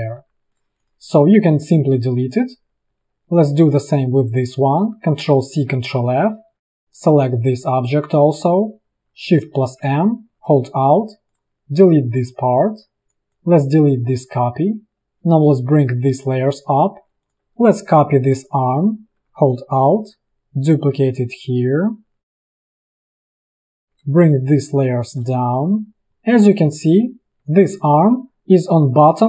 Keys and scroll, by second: 0.3 v, 1.3 Delete, 5.2 ctrl+c, 5.8 ctrl+f, 9.6 shift+m, 12.7 v, 14.1 Delete, 16.4 ctrl+shift+], 22.1 alt+space, 22.8 i, 23.3 space, 23.6 v, 24.6 ctrl+shift+[.